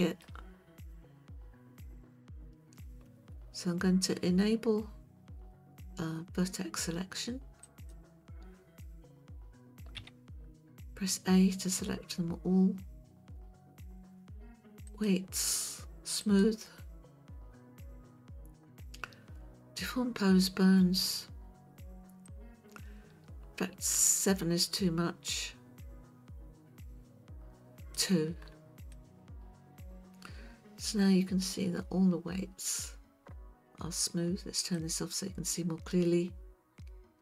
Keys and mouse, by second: 7.6 click, 10.0 a, 14.9-16.4 drag, 22.4-28.1 drag, 28.9-31.4 middle drag, 32.7 click, 34.6 click.